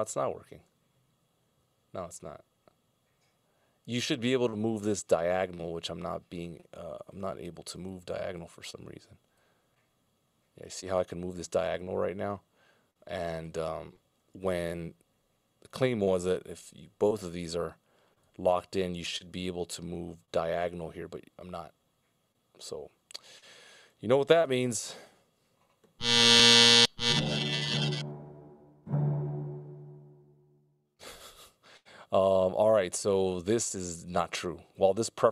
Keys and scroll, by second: 14.5 super+z, 24.8 super+z, 26.0 super+z, 28.1 super+z.